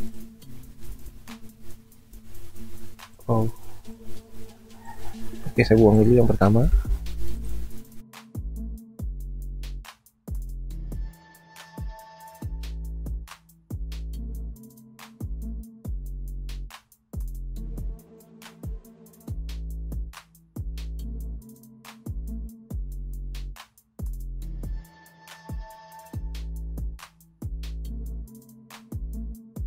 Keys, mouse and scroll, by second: 0.9 ctrl+z, 6.7 Delete, 9.8-11.4 typing, 12.8-13.5 typing, 16.9 ctrl+t, 17.9 alt+shift+click, 22.5 alt+shift+click.